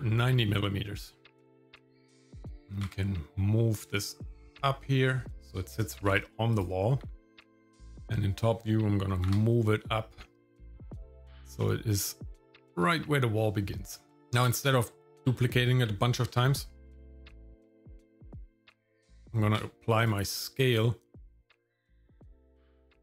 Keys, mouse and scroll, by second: 2.7 g, 6.0 g, 7.0 g, 8.0 middle click, 9.1 g, 13.0 shift+middle click, 14.1 scroll up 1, 14.3 scroll down 1, 14.6 shift+middle click, 16.5 shift+middle click, 16.9-17.5 scroll up 2, 19.4 ctrl+a, 20.7-22.2 drag.